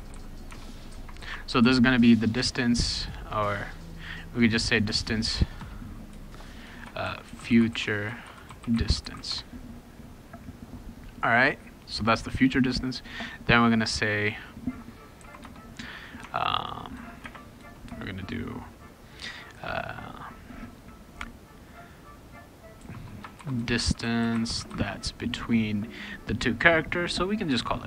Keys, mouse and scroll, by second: 0.0-1.2 typing, 1.6 ctrl+s, 3.0-4.7 drag, 5.4 BackSpace, 5.6 BackSpace, 6.6-9.8 typing, 14.2 click, 15.2 ,, 15.4 Return, 16.2 Tab, 16.9 BackSpace, 17.2 space, 17.6 BackSpace, 22.8-25.2 typing.